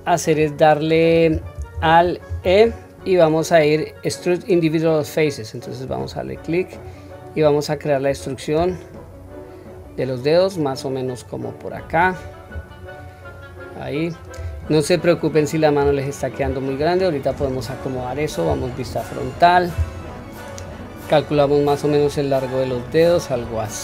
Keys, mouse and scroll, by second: 2.3 alt+e, 12.5-12.9 scroll down 1, 12.9-14.3 middle drag, 15.6 scroll down 4, 15.8-16.3 scroll up 2, 17.3 middle click, 17.3-17.8 scroll up 3, 18.5 KP_1, 21.3 click, 23.4-23.8 scroll down 3.